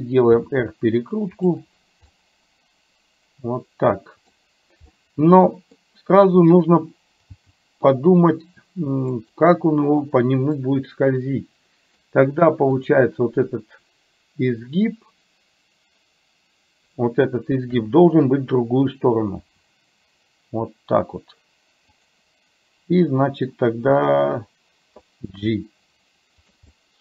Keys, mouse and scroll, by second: 0.4 r, 2.2-4.4 middle drag, 5.0 middle click, 7.4 g, 10.7-12.0 middle drag, 12.8 click, 17.8 KP_7, 19.4 r, 25.3 g, 26.8-27.0 middle drag, 26.8-27.0 scroll up 1.